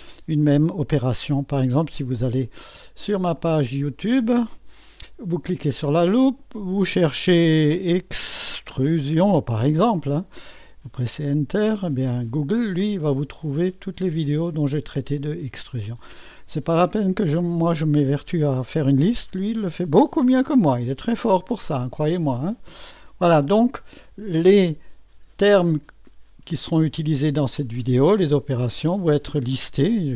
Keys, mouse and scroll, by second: 0.0-1.1 drag, 1.6 click, 3.4 click, 3.7 click, 6.2 click, 7.4-10.1 typing, 11.2 Return, 12.6-13.5 scroll down 1, 13.6-14.2 scroll down 1, 14.3-14.7 typing, 15.2-15.8 scroll down 1, 16.5-17.7 scroll up 1, 17.8-19.2 scroll down 3, 20.0-20.5 scroll up 1, 25.7 click, 28.2 click, 29.5-30.1 drag.